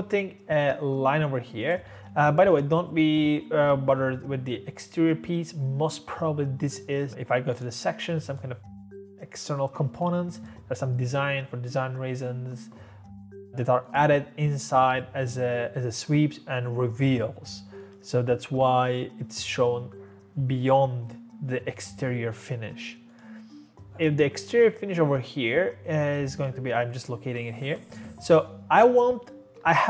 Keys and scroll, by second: 1.9 Escape, 2.0 Escape, 29.6-29.8 typing.